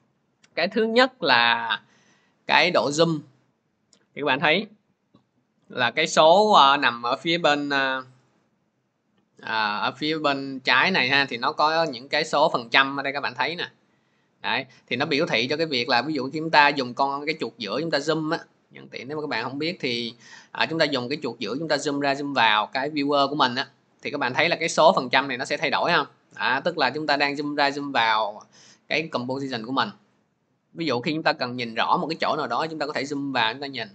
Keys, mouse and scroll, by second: 2.2-2.5 scroll, 3.3 scroll, 5.2 click, 7.8 click, 8.2 click, 12.1 click, 12.9 click, 14.3 click, 15.1 scroll, 15.7-16.9 scroll, 17.5-17.9 scroll, 18.4-19.3 scroll, 19.7-20.0 scroll, 20.4-23.7 scroll, 25.2-26.7 scroll, 26.8 scroll, 30.0-30.5 scroll, 30.6-31.0 scroll, 32.4 middle click.